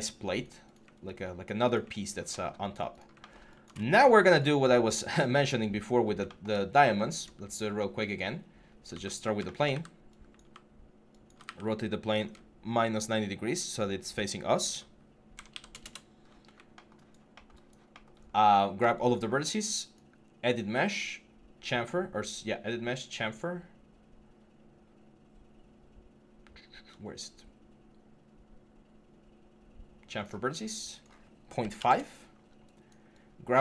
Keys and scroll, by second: 8.7 e, 9.5 w, 10.2 e, 11.2 ctrl+a, 15.3 typing, 15.6 Return, 31.5 5.